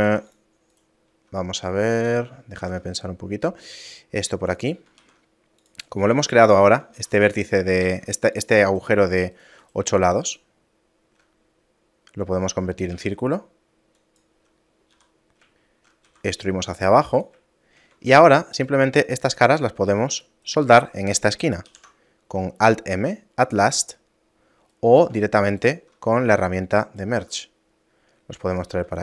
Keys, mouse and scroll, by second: 0.1 ctrl+r, 2.1 ctrl+z, 2.6 ctrl+r, 7.9 ctrl+Tab, 8.7 right click, 9.1 shift+right click, 10.7 shift+middle click, 12.9 w, 14.9 t, 15.6 shift+middle click, 16.1 e, 17.5 shift+middle click, 18.1 ctrl+Tab, 19.2 right click, 20.1 shift+right click, 20.5 shift+right click, 21.7 alt+m, 24.7 right click, 26.1 right click, 27.8 middle click, 28.5 right click.